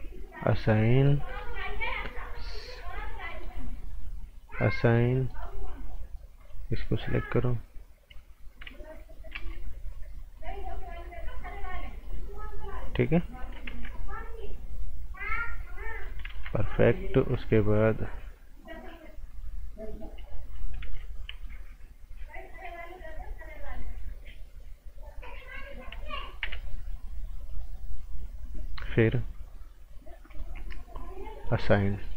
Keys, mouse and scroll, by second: 0.6 scroll down 1, 0.8 right click, 1.2 scroll down 1, 1.4 right click, 1.8 scroll up 1, 2.2 click, 3.3 right click, 4.4 click, 5.3 right click, 6.4 click, 6.8 right click, 9.3 z, 9.5 scroll down 1, 10.3 click, 13.7 ctrl+z, 14.4 click, 16.3 ctrl+z, 16.5 scroll up 1, 16.7 right click, 17.2 scroll up 1, 17.3 right click, 19.3 click, 20.8 b, 23.5 click, 26.4 t, 27.5 click, 30.3 click, 31.7 scroll down 1, 32.0 right click.